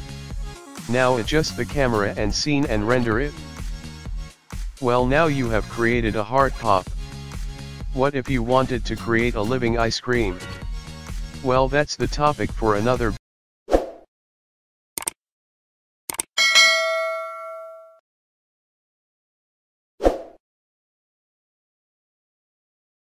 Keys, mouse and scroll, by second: 0.2 g, 1.6 s, 2.3 g, 3.3 s, 4.0 click, 5.6 click.